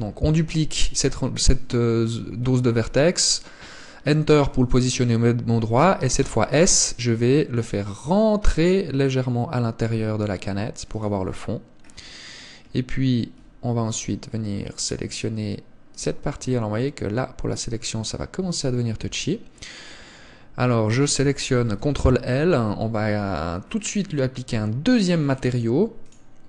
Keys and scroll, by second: 6.5 s, 18.7 Tab, 19.3 Tab, 21.9 ctrl+l.